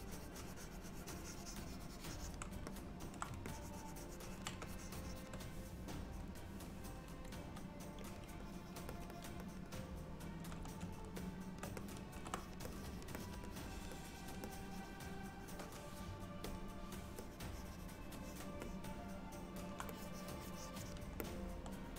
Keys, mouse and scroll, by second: 0.0 ctrl+click, 2.8 middle click, 3.6 ctrl+click, 4.7 shift+click, 6.4 click, 7.4 f, 8.5 click, 9.0 click, 9.2 click, 9.5 click, 11.3 shift+middle click, 11.9 ctrl+middle click, 12.4 click, 12.7 click, 13.2 click, 13.6 click, 14.0 click, 14.6 click, 16.8 click, 17.3 click, 18.7 alt+middle click, 20.0 click, 21.3 middle click.